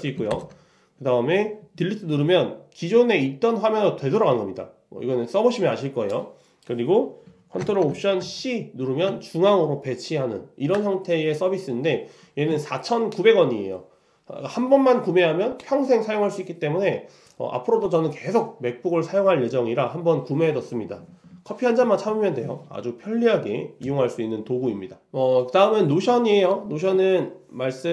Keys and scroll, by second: 0.4 ctrl+alt+Delete.